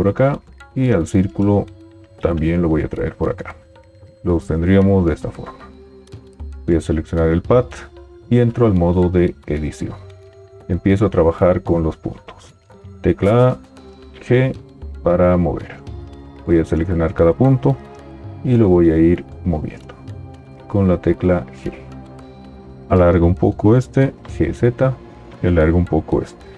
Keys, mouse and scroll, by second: 2.3 g, 9.0 Tab, 13.0 a, 14.1 g, 19.2 g, 24.3 g, 24.3 z.